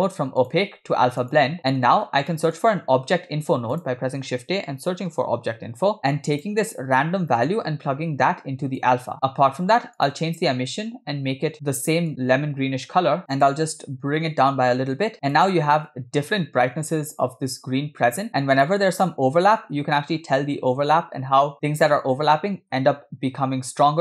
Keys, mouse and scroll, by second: 0.4-1.6 drag, 1.6 middle click, 2.1 scroll up 2, 2.3 middle click, 3.2 shift+a, 7.4-9.1 drag, 9.1 middle click, 9.3-10.0 scroll up 2, 10.0 click, 18.3 scroll up 2, 18.7 shift+middle drag, 18.9-19.7 shift+scroll up 4.